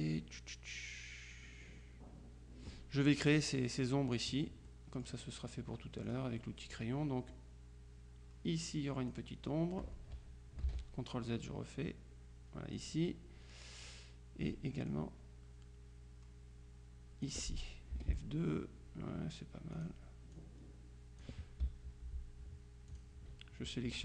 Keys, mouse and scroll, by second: 1.2-3.3 middle drag, 4.7 middle click, 4.9 click, 6.1 click, 7.4-9.7 drag, 10.7 ctrl+z, 11.3-13.3 drag, 15.0-17.8 drag, 18.0 F2, 19.9 click, 20.7 click, 23.0 click.